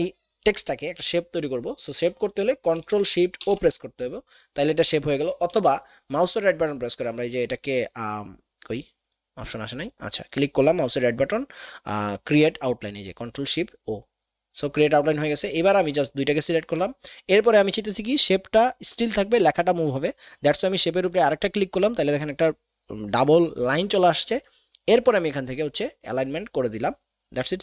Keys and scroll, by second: 3.4 ctrl+shift+o, 5.5 ctrl+z.